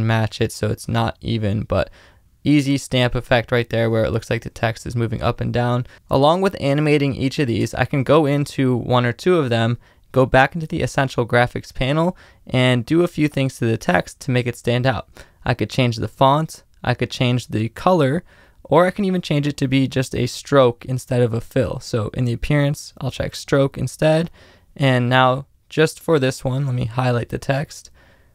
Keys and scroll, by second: 0.3 space, 4.5 space, 6.1 space, 7.6 space.